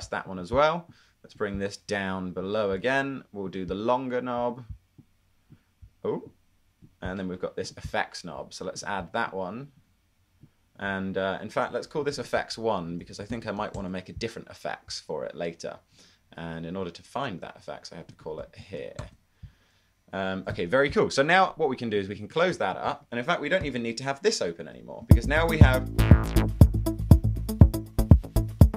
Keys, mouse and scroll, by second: 12.9-14.8 typing, 18.5 Right, 18.6-19.0 typing, 23.8 d, 25.2 d.